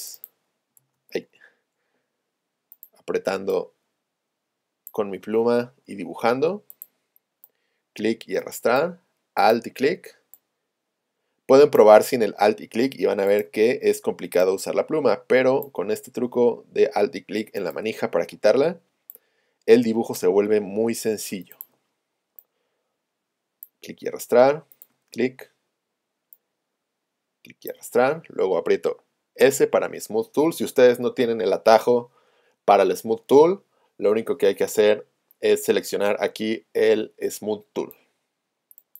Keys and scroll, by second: 0.8 super+z, 6.3 shift+super+a, 8.0 space, 29.5 s.